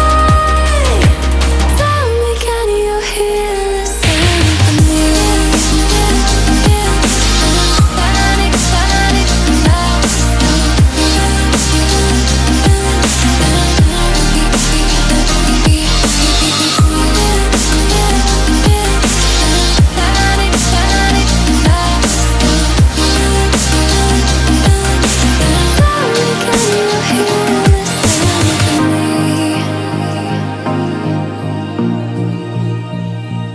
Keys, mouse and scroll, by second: 0.2 alt+scroll up 1, 1.2-2.0 alt+scroll down 1, 3.1 alt+scroll up 1, 3.8-4.1 alt+scroll up 1, 4.1 click, 5.0-8.3 typing, 8.5 click, 10.4 click, 11.0 click, 15.5-16.9 alt+scroll down 2, 16.9-17.6 alt+scroll up 2, 17.8-19.7 drag, 30.8 Right, 32.5 click, 33.0 alt+scroll down 1.